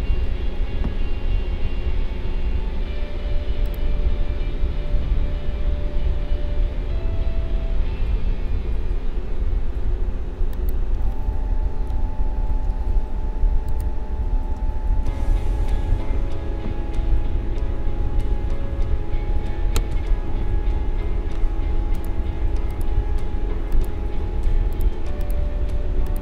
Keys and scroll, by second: 20.3 ctrl+z.